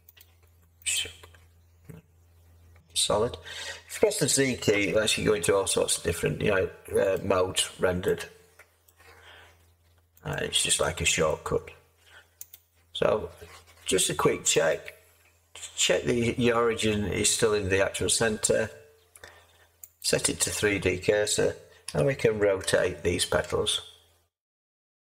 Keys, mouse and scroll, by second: 2.8 z, 4.7 z, 21.8 r.